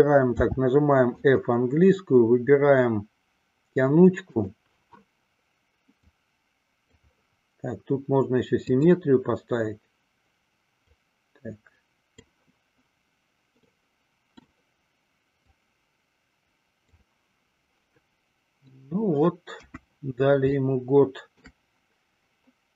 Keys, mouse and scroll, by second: 0.2 f, 4.4 click, 6.1-7.1 drag, 8.7 click, 10.8-12.5 drag, 13.7 middle click, 15.5-17.1 drag, 18.1 middle click, 19.8 KP_1, 20.5-21.5 shift+middle drag.